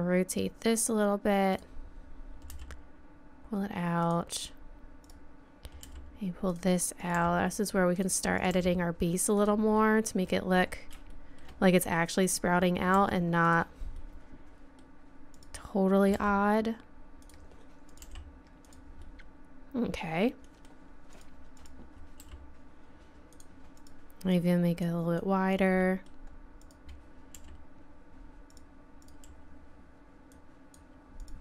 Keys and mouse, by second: 2.5 g, 5.0-6.9 right drag, 5.8 g, 7.0 right click, 7.1 g, 8.6 g, 9.8 right click, 9.9 right click, 10.0 right click, 12.3 right click, 13.0 g, 15.3 right click, 16.1 g, 17.9 right click, 18.0 g, 19.0 middle click, 20.0 right click, 21.1-22.2 right drag, 22.2 g, 23.8 click, 26.0 middle click, 26.6-28.2 right drag, 27.4 g, 30.3 click.